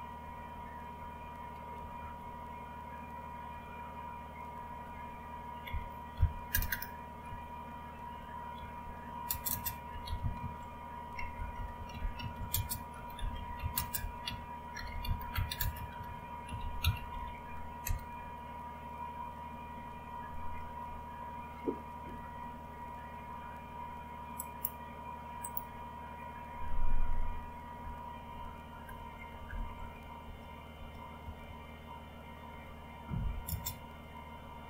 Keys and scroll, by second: 1.7 Up, 3.4 Up, 5.6 Down, 6.1 Up, 6.5 Return, 6.7 Return, 7.3 Up, 8.5-17.5 typing, 17.8 Return, 27.8 Left, 28.3-28.6 Left, 28.8 Left, 29.0 Left, 29.2 Left, 29.4 Left, 29.6 Left, 29.8 Left, 30.2 space, 30.7 space, 31.2 Right, 31.4 Right, 31.9-33.1 Right, 33.1 Left, 33.4 space.